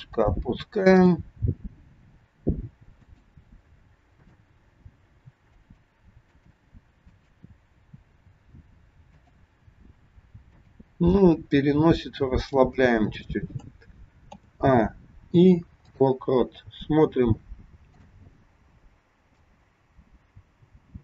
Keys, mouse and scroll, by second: 1.1 click, 2.0 g, 4.1 click, 5.4 g, 6.2 click, 7.1 click, 8.0 g, 10.4 click, 11.5 g, 14.3 a, 15.3 i, 17.9 click, 19.6 click.